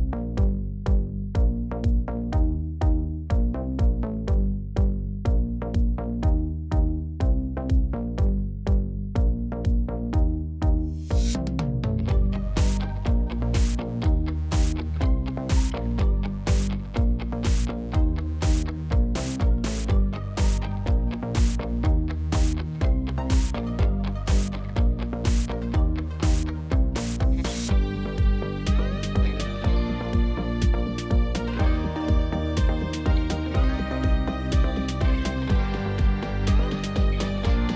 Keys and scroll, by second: 1.2 g, 1.4 o, 1.5 l, 1.6 d, 2.1 Return, 4.9-6.0 typing, 6.2 Return, 7.8 1, 8.0 Return, 10.2 ., 10.5 2, 10.6 5, 10.9 Return, 16.8 Tab, 25.5 shift+z, 27.3 g, 27.5 z, 29.8 g, 30.0 x, 31.1 shift+d, 31.3 x, 35.1 1, 35.2 2, 35.5 Return.